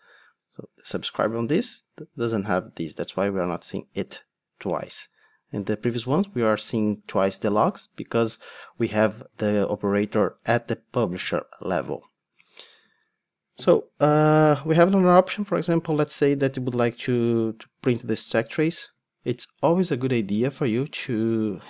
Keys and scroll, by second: 15.3 super+f, 16.6 super+d, 17.2 Escape.